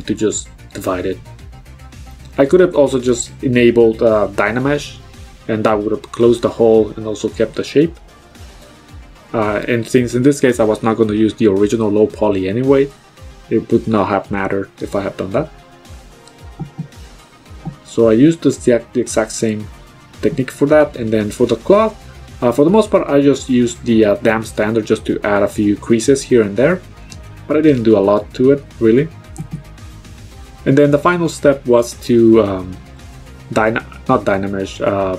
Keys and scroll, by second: 19.2 b, 24.8 ctrl+z.